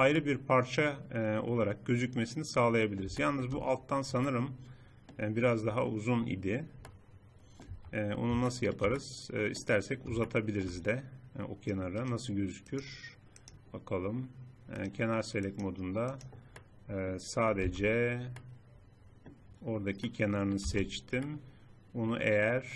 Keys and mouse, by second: 0.3-1.9 drag, 1.9 middle click, 3.1 click, 5.9 click, 7.6 Tab, 12.3 click, 12.6-13.8 middle drag, 13.8 click, 14.7 middle click, 15.3 click, 15.5-16.5 middle drag, 17.6 z, 20.6 z.